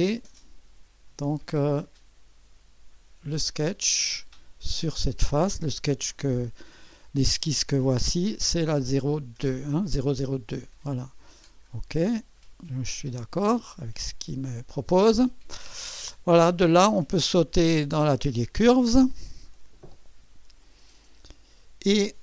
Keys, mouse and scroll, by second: 3.3 click, 7.0 click, 10.2 click, 11.3 click, 13.9 click, 17.0 click, 18.7 click.